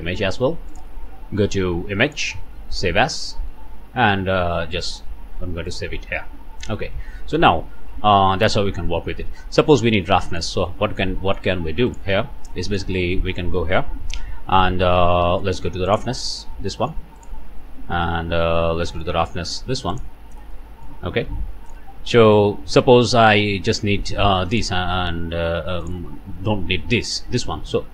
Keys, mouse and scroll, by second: 0.7 click, 2.1 click, 3.1 click, 5.7 click, 9.7 scroll down 1, 10.1 middle click, 11.0 middle click, 11.9 middle click, 13.1-13.6 scroll up 2, 13.6 click, 14.5-15.6 drag, 16.4 typing, 16.7 ctrl+shift+click, 16.9 click, 17.2 click, 18.1-19.2 drag, 19.9 ctrl+shift+click, 20.5 ctrl+shift+click, 21.2 middle click, 24.5 middle click, 25.8 middle click.